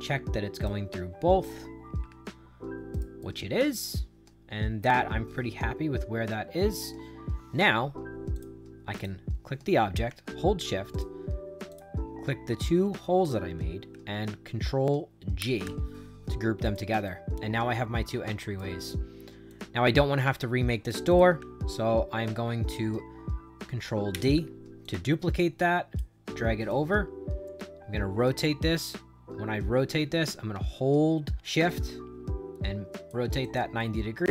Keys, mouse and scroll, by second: 1.9 Up, 2.8 right click, 3.1-6.8 right drag, 8.3 click, 8.9 click, 10.8 shift+click, 11.6 shift+click, 15.3 ctrl+g, 16.6 click, 17.0-18.5 right drag, 19.4-20.8 drag, 21.0 click, 24.0 ctrl+d, 24.7-25.9 drag, 26.3 right click, 31.6-33.0 shift+drag, 33.3 click, 33.7 right click.